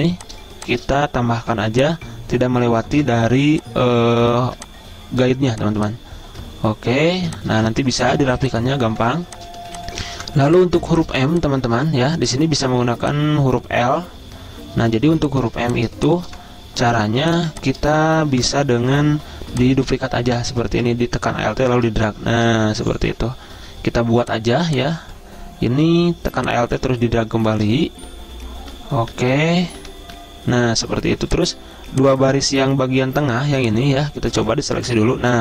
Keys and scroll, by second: 0.0 z, 0.9 v, 1.5 z, 3.0 v, 6.9 v, 7.2 z, 7.9 z, 8.9 v, 10.3-11.8 typing, 15.1-17.1 typing, 18.4 v, 22.7 Left, 22.9-23.2 typing, 29.2 Right, 30.0 Left, 30.1 Left.